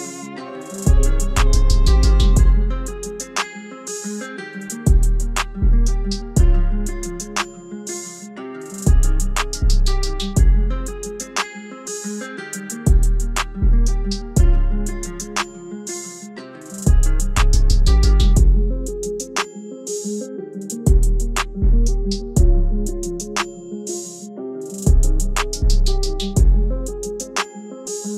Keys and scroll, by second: 0.2 alt+w, 7.3 F4, 15.8 ctrl+a.